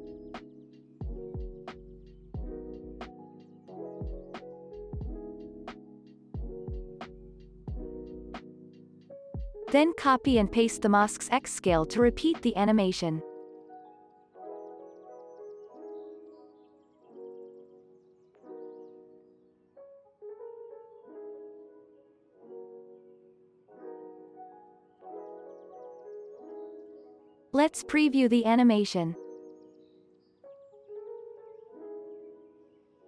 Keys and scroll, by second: 2.4 ctrl+c, 4.5 alt+z, 5.7 ctrl+c, 5.8 ctrl+v, 6.3 ctrl+s, 7.3 x, 9.9 ctrl+c, 10.2 ctrl+v, 12.1 ctrl+c, 12.4 x, 15.1 ctrl+v, 16.0 x, 21.7 ctrl+c, 22.8 ctrl+s, 25.4 x, 27.4 space.